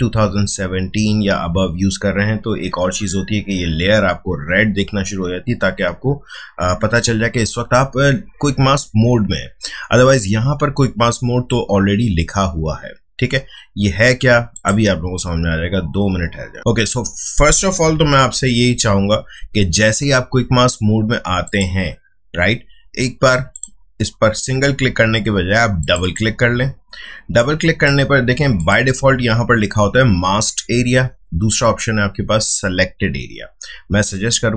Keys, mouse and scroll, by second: 14.5 click, 17.9 [, 18.4 [, 18.5 [, 21.4 click, 31.6 click.